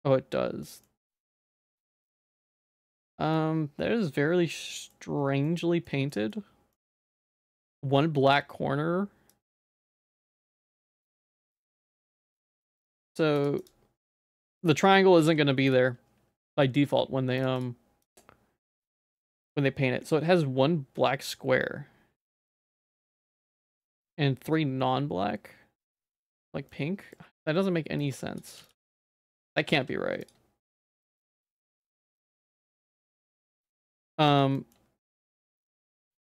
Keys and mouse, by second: 0.8-2.0 middle drag, 2.3 middle click, 3.3 middle click, 4.5 middle click, 5.4 middle click, 6.1 shift+middle click, 6.7 middle click, 9.5 click, 9.8 click, 10.0 Tab, 10.4 a, 10.6 middle click, 11.1 2, 11.8 ctrl+x, 12.4 ctrl+z, 12.8 ctrl+x, 13.4 click, 14.4 a, 15.2 ctrl+s, 15.7-16.8 drag, 17.4 click, 18.1-26.7 drag, 26.7 middle click, 28.1 click, 28.6 x, 29.2 middle click, 29.7 ctrl+s, 30.2 click, 31.2 middle click, 32.6 ctrl+s, 32.9 click, 34.3 middle click, 34.6 shift+middle click, 35.0 Tab.